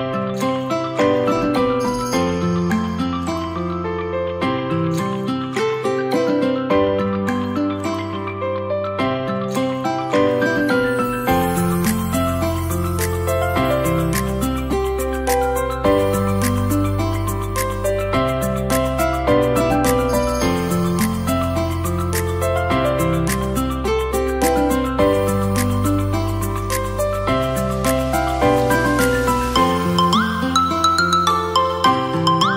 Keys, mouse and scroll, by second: 0.9 click, 1.6 l, 2.1 click, 3.5 click, 3.8 l, 4.5 click, 6.3 click, 6.6 l, 7.4 click, 9.9 click, 10.7 Tab, 11.0 click, 11.4-12.7 middle drag, 12.7-13.1 scroll down 1, 13.1-15.4 middle drag, 15.7 click, 17.4 click, 18.6-20.4 middle drag, 20.4-21.8 drag, 22.7-24.6 drag, 27.6-27.9 drag, 27.9-28.6 middle drag, 28.6-30.5 scroll up 2, 30.5-31.4 scroll down 3, 31.4-32.5 drag.